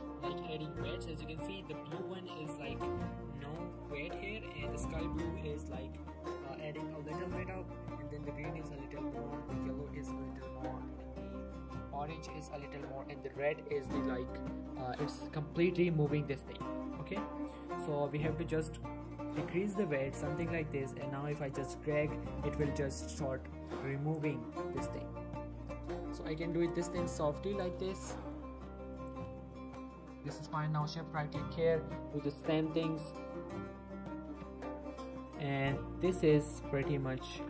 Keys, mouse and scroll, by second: 0.6 ctrl+z, 1.2 shift+middle click, 1.6-2.0 scroll up 1, 2.1 shift+middle click, 2.4-3.5 shift+scroll up 2, 3.7 shift+middle click, 4.1-5.8 shift+scroll up 2, 5.8-6.5 scroll down 1, 7.2 shift+middle click, 7.4 shift+scroll up 1, 8.7 shift+middle click, 10.2 shift+middle click, 16.8 right click, 17.3-18.1 scroll down 1, 19.6-20.4 drag, 24.3 r, 26.0 right click, 26.3 ctrl+z, 26.9-27.8 click, 27.8 ctrl+z, 28.0-28.5 click, 29.2 r, 30.0 right click, 30.3 alt+a, 30.9 shift+click, 31.3 scroll down 1, 31.5-32.1 click, 32.3 ctrl+z, 32.5-33.6 click, 33.5 r, 34.3 right click, 34.5 alt+a, 34.9 shift+click, 36.0 r, 36.8 right click.